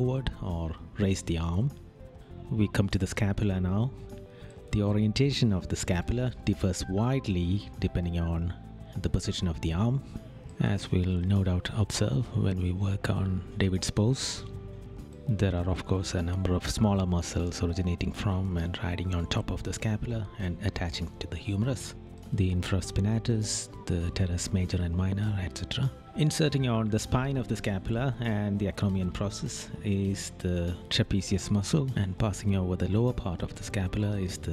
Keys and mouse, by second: 0.4 right click, 2.1 right click, 3.2 right click, 9.6 right click, 12.8 right click, 25.7 right click, 28.6 right click, 31.1 right click.